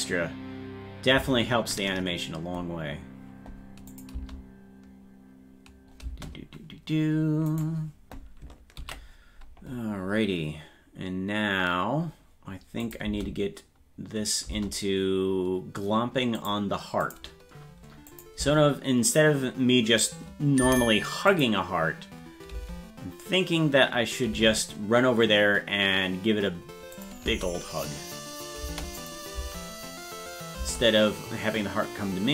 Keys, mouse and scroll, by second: 3.9 click, 4.2 space, 7.7 right click, 9.0 ctrl+s, 12.8 click, 13.1 space, 16.4 click, 17.1 click, 18.1 click, 18.4 space, 21.3 click, 22.6 space, 25.6 space, 27.0 click, 27.3 space, 29.0 click, 29.4 space.